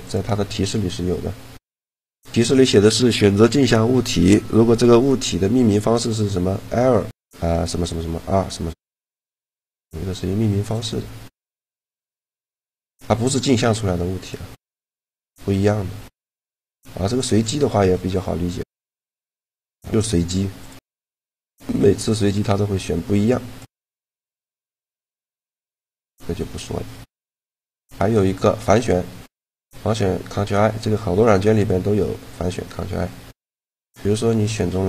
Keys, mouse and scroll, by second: 10.5-12.2 drag, 11.3 g, 12.9 a, 13.9 click, 15.0 click, 18.8 a, 19.7-21.2 drag, 21.5 a, 22.0 click, 22.6 click, 25.5 middle click, 27.3 click, 28.2 click, 33.9 a, 34.4 click.